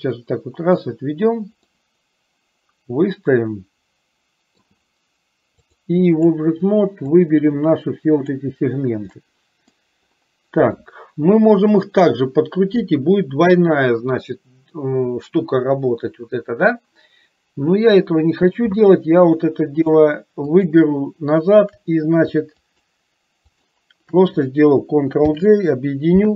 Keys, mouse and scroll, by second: 1.9-4.9 middle drag, 5.7 click, 7.4-8.5 drag, 9.1 middle click, 20.7 shift+click, 22.8 shift+click, 25.4 ctrl+j.